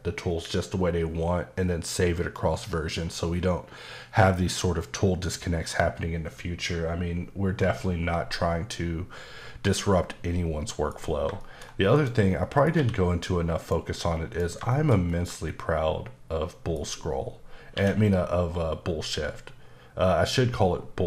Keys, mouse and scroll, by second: 7.6 middle click, 11.4 middle click, 11.9 click, 12.4 middle click, 12.7 q, 13.6 click, 14.3 click, 14.7 middle click, 17.7 q.